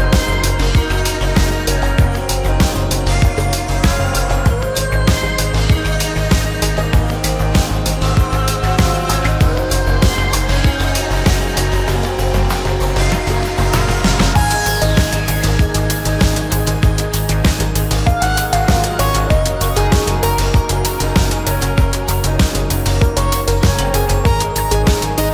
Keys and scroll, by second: 0.4 f, 1.7 space, 2.4 f, 5.4 shift+space, 5.6 Escape, 11.2 m, 13.2 ctrl+Escape, 16.0 Escape, 16.6 Escape, 17.0 space, 18.5 m, 19.9 space, 20.0 Escape.